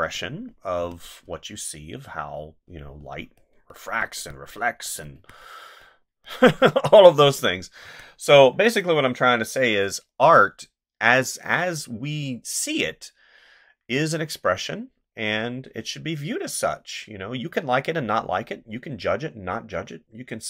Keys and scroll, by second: 0.8 space, 5.2 space, 7.8 space.